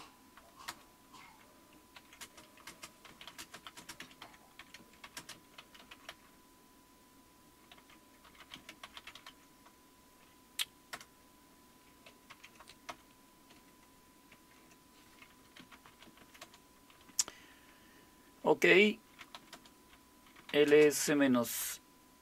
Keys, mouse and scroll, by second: 0.0-0.3 typing, 0.7 Return, 1.7-6.6 typing, 7.7-16.7 typing, 18.9-21.6 typing.